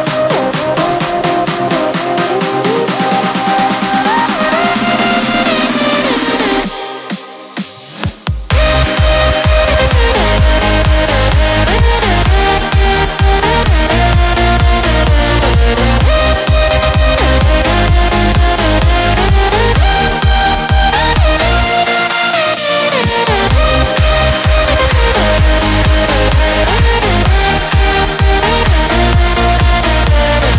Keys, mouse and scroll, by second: 7.5-9.2 alt+drag, 9.2-11.1 alt+drag, 11.1-16.7 alt+drag, 16.7 click, 23.3 click, 24.3 space, 24.5 click, 24.8 space, 25.5 click, 28.7 i, 29.4 click.